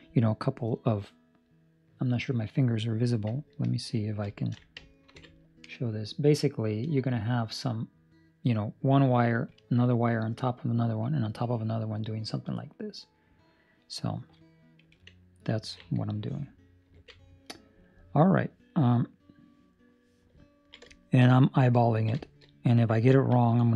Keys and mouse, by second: 5.0 ctrl+alt+KP_8, 17.1 ctrl+alt+KP_2, 20.5 ctrl+middle click, 20.8 shift+middle click, 21.9 ctrl+middle click, 22.1 shift+middle click, 22.3 middle click, 23.1 ctrl+middle click, 23.3 middle click.